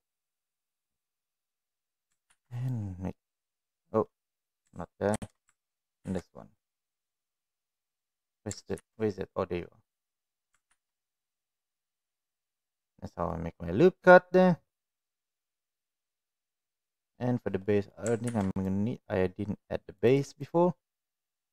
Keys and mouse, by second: 1.4 middle click, 2.3 ctrl+r, 4.1 middle click, 8.7 ctrl+r, 13.3-14.4 middle drag, 15.0 middle click, 16.5 middle click, 17.6 middle click, 18.2 ctrl+r, 20.3 click, 20.9 middle click.